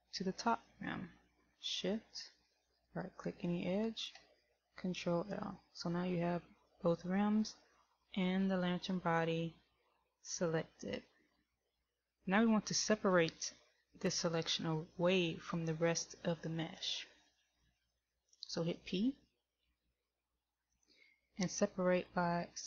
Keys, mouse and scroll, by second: 3.1 shift+right click, 7.1 ctrl+l, 19.9 p.